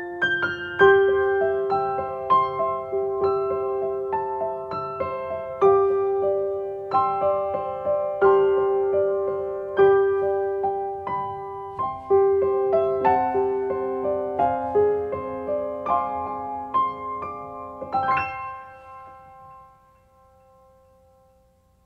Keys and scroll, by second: 7.1 ctrl+space, 18.8 ctrl+space.